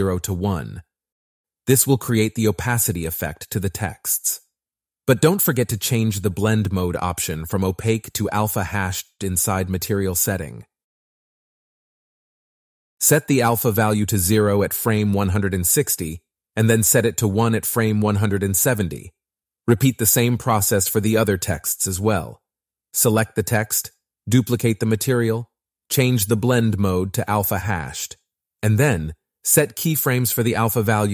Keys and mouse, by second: 1.1 click, 2.8 shift+click, 5.1 click, 8.0 click, 10.2-11.2 drag, 12.4 click, 13.0 Down, 13.8-14.9 drag, 15.2 click, 16.6-17.6 space, 17.7 click, 18.6 click, 21.3 click, 23.9-25.8 drag, 25.8 space, 25.9 click, 26.1 click, 26.5 Up, 26.7 click, 27.6 ctrl+c, 28.2 click, 28.4 click, 28.7 ctrl+v, 29.0 space, 29.2 space, 29.3 click.